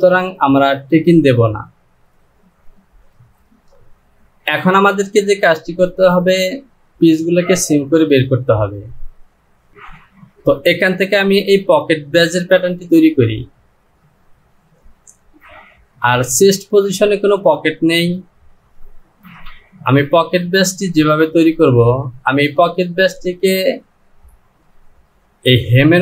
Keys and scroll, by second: 19.3 Return.